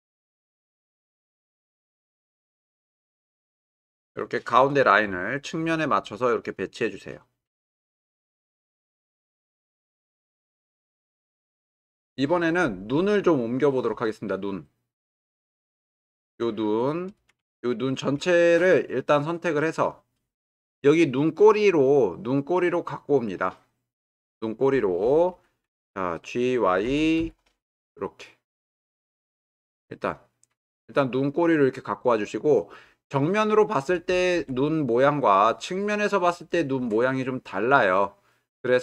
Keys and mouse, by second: 3.0 shift+click, 12.9-13.7 middle drag, 15.0-15.5 drag, 16.0 middle click, 18.0 ctrl+middle click, 18.8-19.6 drag, 26.8 g, 27.2 y, 34.0-34.5 alt+middle drag.